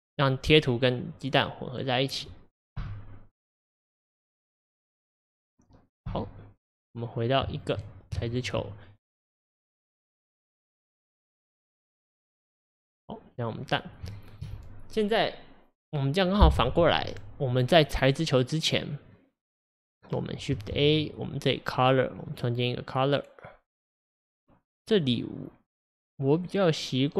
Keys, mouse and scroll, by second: 2.9 x, 4.8-6.2 drag, 6.2 x, 8.3 ctrl+shift+click, 10.1-14.8 drag, 14.8-18.3 shift+middle drag, 18.3-27.1 drag.